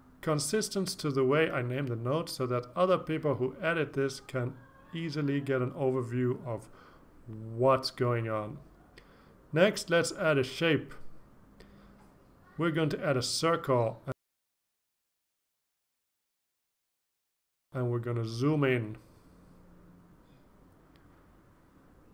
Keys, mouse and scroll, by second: 2.2 Return, 2.6 BackSpace, 3.1 Left, 3.5 Right, 4.0 BackSpace, 4.3 Return, 8.6 click, 11.9 click, 14.0 click, 16.1 click, 20.9-22.1 ctrl+scroll up 6.